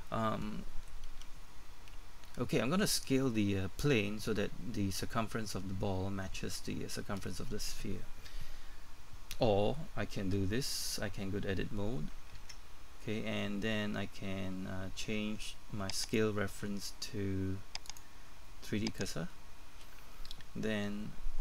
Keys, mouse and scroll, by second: 1.1 KP_1, 11.0 Tab, 16.0 click.